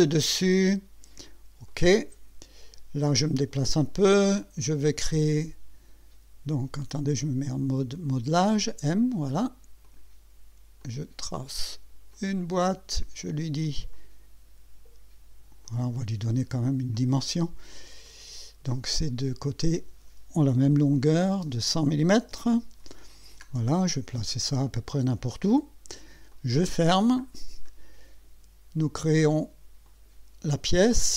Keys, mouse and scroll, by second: 0.1 click, 1.7 click, 3.2-4.4 right drag, 4.5 scroll down 1, 5.1 right click, 8.4 click, 9.8 click, 10.8 click, 12.1 click, 12.5 right click, 13.9 click, 15.6 click, 16.9 click, 18.0 click, 19.6 click, 20.7 KP_1, 21.2 KP_0, 22.3 Return, 23.0-23.4 scroll down 2, 24.4-25.4 drag, 26.3 click, 27.2-27.5 scroll down 2, 27.7-28.5 right drag, 29.9 click.